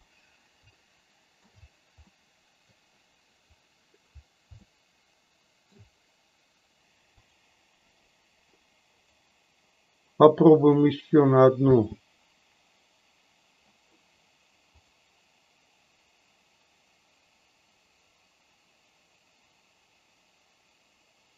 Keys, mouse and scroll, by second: 0.7-1.4 middle drag, 2.1-2.8 middle drag, 4.5-5.8 shift+middle drag, 7.3 click, 8.9 click, 10.6 click, 11.6 space, 14.9 click.